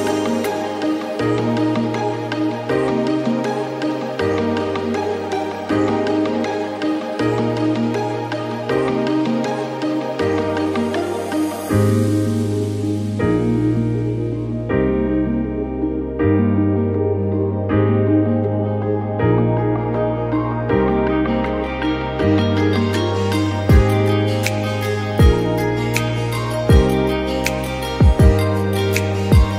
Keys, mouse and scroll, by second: 0.1 scroll up 1, 0.3 shift+middle click, 0.5 scroll down 2, 0.7 e, 2.1 shift+middle click, 2.6 s, 3.0 e, 3.4 scroll down 1, 3.6-4.0 scroll up 7, 4.0-6.1 shift+drag, 6.1 shift+middle click, 6.5 scroll down 4, 6.6 shift+middle click, 12.2 scroll down 17, 12.5 shift+middle click, 13.9 middle click, 14.0 scroll down 5, 14.2 middle click, 14.7 ctrl+r, 16.8 scroll up 10, 17.0 shift+middle click, 17.6 ctrl+b, 18.6-19.4 scroll down 5, 19.7 scroll up 10, 19.9 shift+middle click, 20.2 click, 21.2-21.6 scroll down 9, 21.8 scroll up 10, 22.0 g, 23.3 alt+click, 23.8 1.